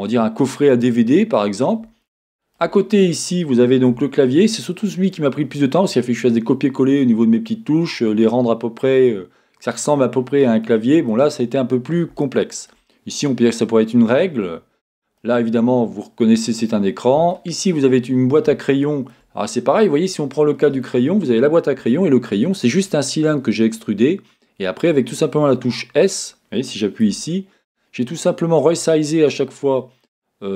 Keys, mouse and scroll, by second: 2.8-3.9 scroll up 2, 3.9 Tab, 4.5-26.0 middle drag, 5.5-7.4 scroll up 2, 7.4-8.1 scroll up 1, 11.5-12.2 scroll down 2, 14.5-15.2 scroll down 2, 18.3-18.6 scroll up 2, 19.1-23.1 scroll up 2, 26.0-27.0 drag, 27.0 Tab.